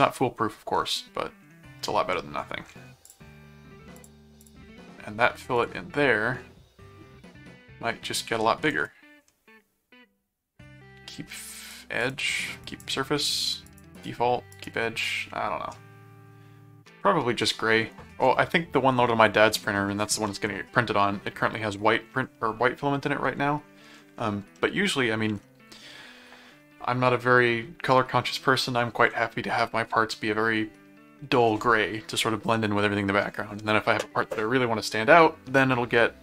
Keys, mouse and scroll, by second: 0.9 middle click, 2.1 middle click, 3.1 click, 3.9 click, 5.5 click, 11.5 click, 12.6 click, 13.7 click, 24.6 middle click, 25.4 middle click.